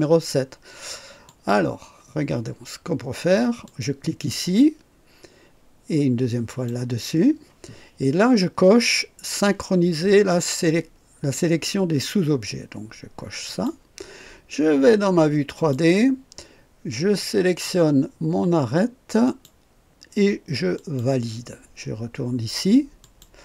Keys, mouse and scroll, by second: 1.2 click, 3.6 click, 6.4 click, 13.4 click, 15.5 click, 17.2 click, 19.2 click, 20.7 click, 23.0 click.